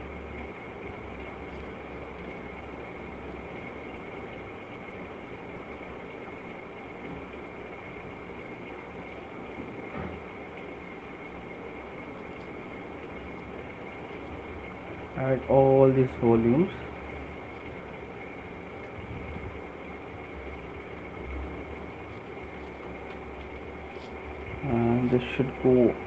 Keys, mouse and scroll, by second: 0.0 click, 0.4 click, 2.1 click, 2.5 click, 3.1 click, 3.1 right click, 4.4 click, 4.9 middle click, 4.9 click, 5.5 click, 7.1 click, 9.1 click, 12.4 click, 13.1 click, 13.5 click, 14.1 click, 15.0 alt+click, 16.2 click, 16.5 click, 16.7 click, 17.1 click, 18.2 click, 19.2 alt+click, 20.9 shift+click, 21.5 alt+click, 22.2 shift+click, 23.7-24.2 typing.